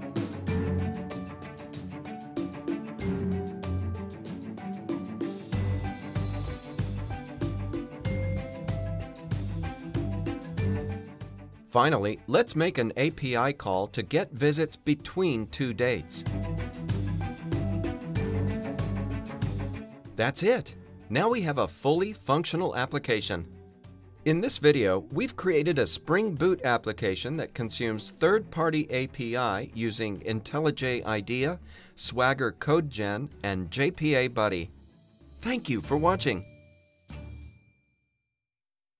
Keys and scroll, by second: 2.2 super+b, 4.5 shift+super+BackSpace, 14.3 Return, 18.0 super+b.